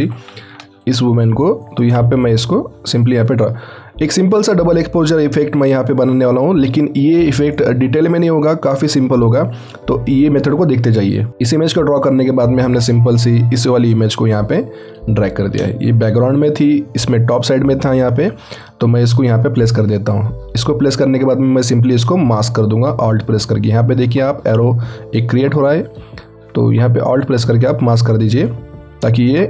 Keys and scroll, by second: 0.2 ctrl+t, 16.0 ctrl+t.